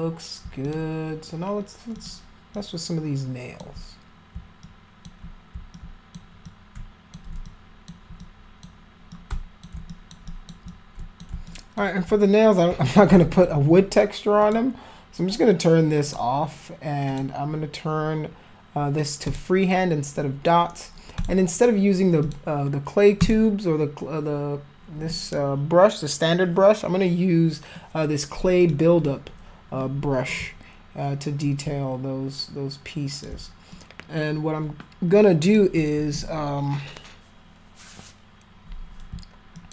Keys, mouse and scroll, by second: 0.6 alt+click, 1.9 alt+click, 2.5-3.5 alt+drag, 4.6 alt+click, 5.7 alt+click, 6.4 shift+click, 7.4 alt+click, 8.2 click, 9.1 shift+click, 9.9 alt+click, 10.3 alt+click, 10.7 shift+click, 11.5 alt+click, 12.1 click, 14.4 click, 16.0 click, 17.0 click, 19.2 click, 21.2 click, 22.2 click, 23.2 click, 28.6 click, 31.4-33.2 alt+drag, 33.7-35.5 alt+drag, 39.5 alt+click.